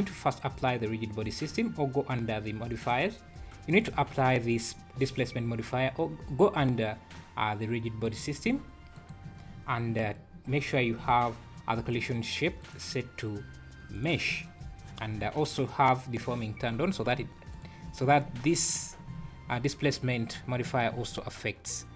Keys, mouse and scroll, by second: 2.8 click, 3.7 click, 8.0 click, 8.9 click, 9.5 scroll down 5, 12.6 click, 14.6 scroll down 4, 16.0 click, 16.6 scroll up 1, 16.7 `, 17.5 click, 20.9 space.